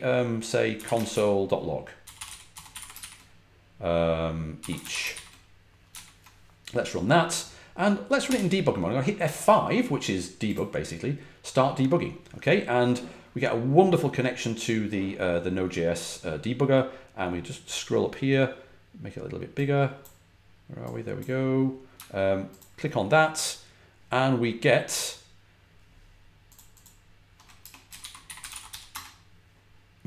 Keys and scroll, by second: 0.0-5.5 typing, 5.8 super+s, 8.2 F5, 27.5-29.1 typing.